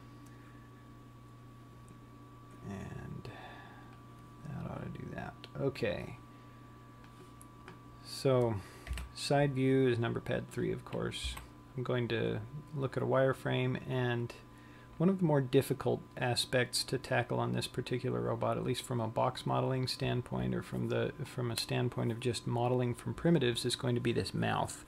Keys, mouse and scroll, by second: 4.7 click, 6.7 click, 9.7 KP_3, 12.1 z, 13.8-15.0 scroll up 3.